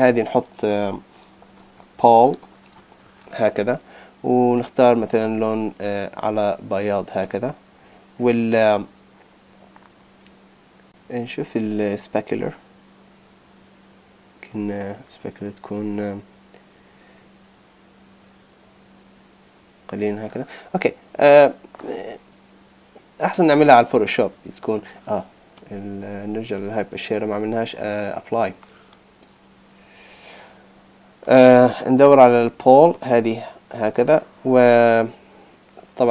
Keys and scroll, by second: 0.5 Left.